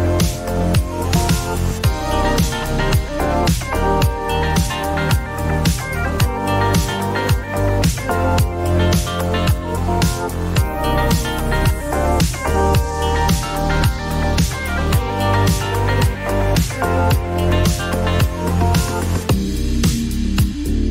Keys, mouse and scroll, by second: 0.2 click, 1.8 click, 2.3 click, 2.9 click, 3.4 click, 3.8 click, 4.4 click, 4.9 click, 9.5 click, 11.8 click, 15.2-16.7 scroll, 17.0 click, 18.1 click.